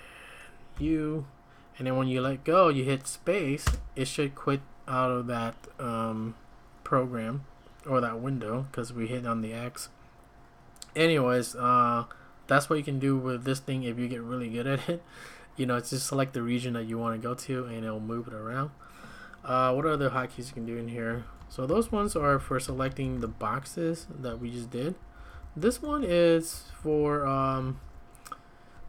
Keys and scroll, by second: 0.3-1.3 typing, 3.6 space, 19.8 `, 20.9-27.8 typing, 25.0 Escape, 25.2 Escape.